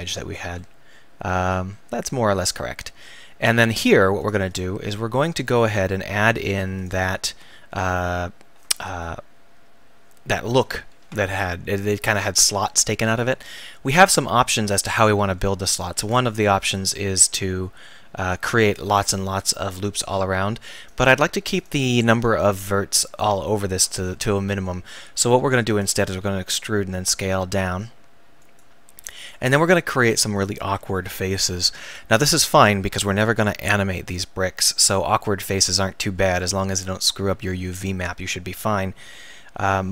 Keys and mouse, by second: 0.4 click, 0.8-2.7 middle drag, 4.2-9.7 right drag, 13.7 middle click, 15.9 ctrl+r, 21.6-24.1 right drag, 24.1-25.4 drag, 25.4 e, 26.1 s, 28.6 click, 29.6-31.9 drag, 31.9-36.4 middle drag.